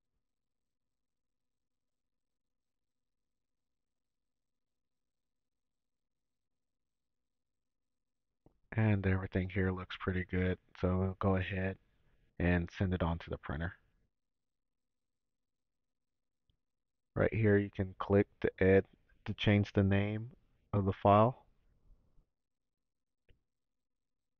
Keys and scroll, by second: 18.8 BackSpace, 20.7-22.9 typing.